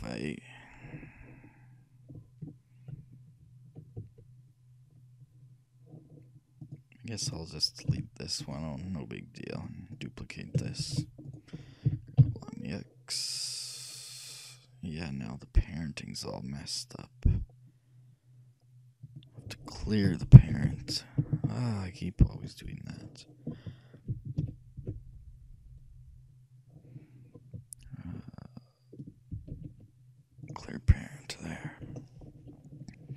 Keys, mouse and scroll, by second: 3.0 KP_3, 4.1 KP_1, 6.7-8.5 drag, 7.4-9.0 right drag, 8.0 x, 9.6-11.4 drag, 10.0-11.9 right drag, 11.0 shift+d, 11.9 g, 23.0 ctrl+o, 23.0-24.5 drag, 24.6 ctrl+p, 29.6 alt+p.